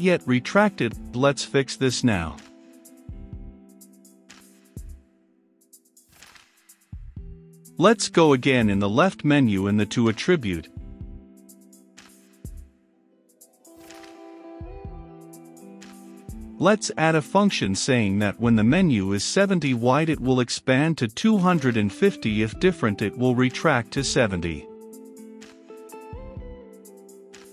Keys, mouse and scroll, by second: 9.3 middle click, 9.8-16.4 drag, 16.2-18.9 typing, 19.4 Return, 20.2 space, 20.7 space, 22.3 Right, 22.4-23.6 typing, 24.7-27.5 typing.